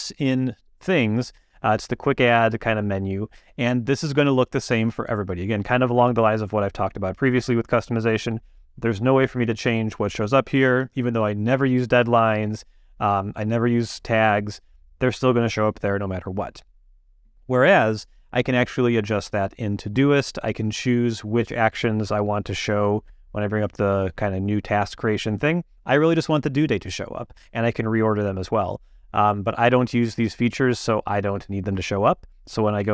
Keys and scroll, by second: 32.8 q.